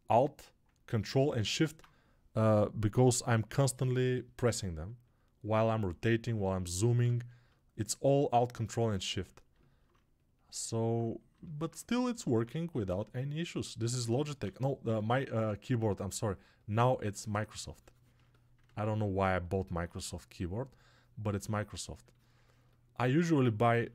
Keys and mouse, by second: 8.0-23.9 alt+drag, 12.8 2, 14.3 ctrl+z, 14.8 1.